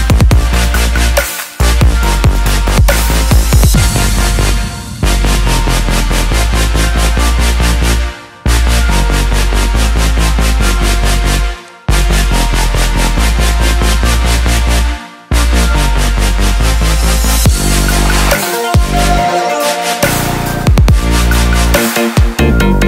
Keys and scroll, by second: 13.0-18.1 typing.